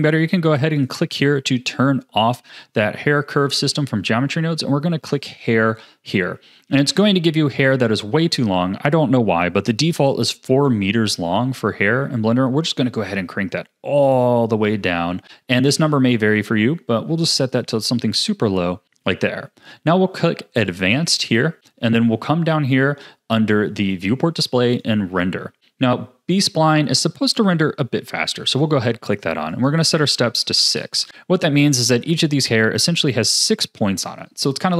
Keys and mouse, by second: 0.8 click, 5.0 click, 7.0 ctrl+s, 10.8-17.5 drag, 20.7 click, 23.9 click, 24.7 click, 28.5 click, 29.6-30.7 drag.